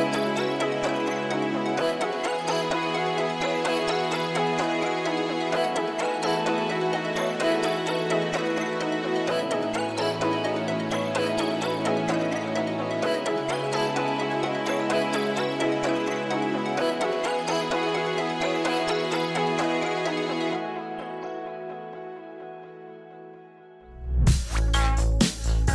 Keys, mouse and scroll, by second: 4.0 scroll up 1, 4.2 middle click.